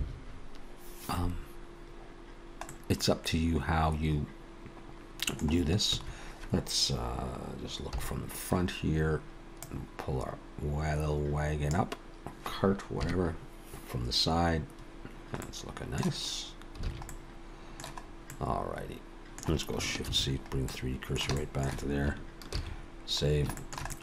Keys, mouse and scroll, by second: 2.4-2.7 scroll down 1, 2.7 middle click, 5.9 a, 8.0 KP_1, 9.6 click, 13.0 KP_3, 15.4 middle click, 16.9 alt+a, 17.1 middle click, 18.1 scroll up 1, 18.3 middle click, 20.1 shift+c, 20.7 middle click, 21.6 shift+middle click, 22.6 ctrl+s, 23.3 scroll down 1, 23.6 shift+middle click, 23.9 middle click.